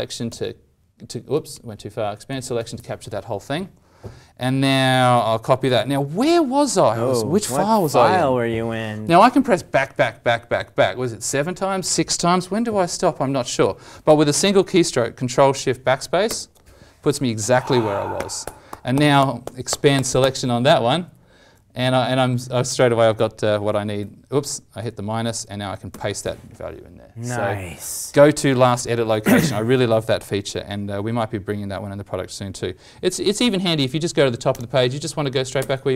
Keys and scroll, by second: 0.2 alt+shift+=, 0.3 alt+shift+-, 2.2 alt+shift+=, 5.6 ctrl+c, 16.2 ctrl+shift+BackSpace, 20.0 alt+shift+=, 21.0 alt+shift+=, 24.0 alt+shift+-, 24.7 alt+shift+=, 25.9 ctrl+v, 35.6 ctrl+shift+BackSpace.